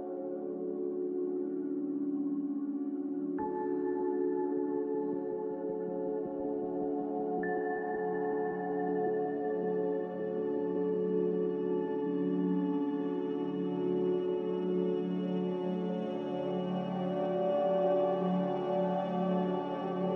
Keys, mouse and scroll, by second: 2.7-3.5 typing, 8.5 c.